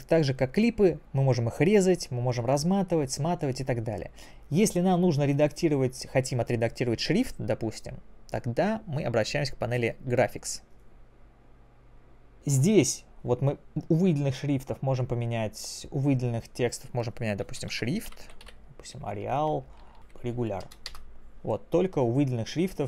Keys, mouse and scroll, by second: 3.1 click, 4.6 click, 9.8 click, 12.0 click.